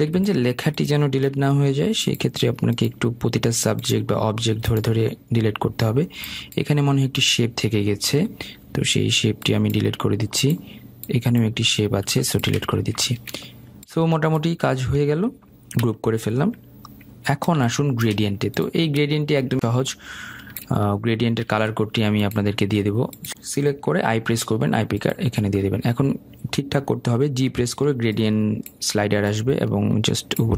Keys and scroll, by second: 0.6 ctrl+z, 2.0 Delete, 9.2 Delete, 16.5 ctrl+g, 22.3 i, 27.8 g.